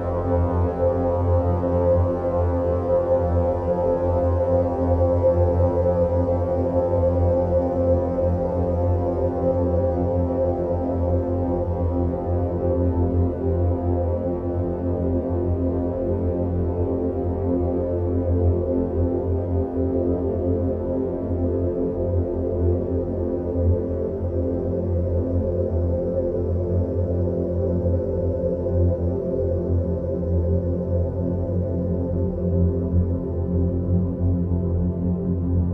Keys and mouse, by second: 3.3 middle click, 4.6 shift+click, 5.2 shift+click, 6.1-6.6 middle drag, 8.7 shift+click, 9.6 shift+click, 11.0 shift+click, 11.4-11.8 middle drag, 12.3 shift+drag, 13.4 shift+click, 14.1 shift+click, 14.6-15.2 middle drag, 16.7 alt+e, 23.1 Tab, 23.9-26.4 middle drag.